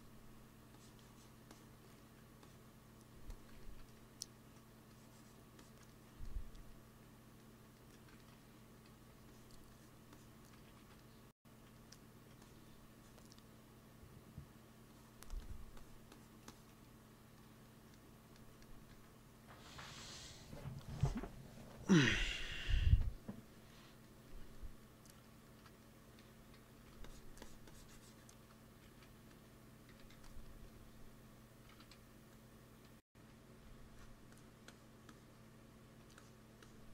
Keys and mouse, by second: 1.9-6.6 drag, 6.8 click, 7.8 middle click, 8.6 f, 9.2-10.6 drag, 10.6 ctrl+z, 10.8 ctrl+z, 10.9 click, 12.3-18.2 drag, 18.8 ctrl+s, 19.9 KP_1, 23.6-26.3 middle drag, 26.3 x, 26.5 f, 26.9-29.5 drag, 28.8-30.5 typing, 31.0 click, 31.6 shift+c, 31.9 f, 33.0 f, 33.9-36.9 drag.